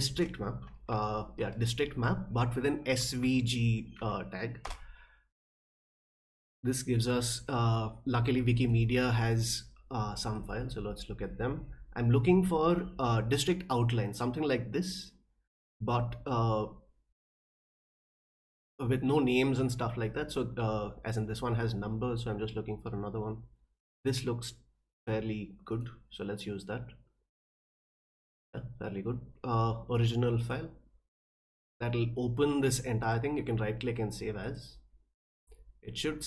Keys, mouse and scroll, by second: 0.1 space, 1.9 Right, 3.0 Left, 3.2 Left, 3.7 Right, 4.0 Right, 4.6 Return, 8.6 middle click, 10.3 click, 11.3 middle click, 15.6 middle click, 16.8 middle click, 20.3 middle click, 21.4 middle click, 22.9 middle click, 25.7 middle click, 27.4 click, 28.5 middle click, 30.4 click, 31.7 middle drag, 32.6 middle drag, 33.0 right click, 34.4 click.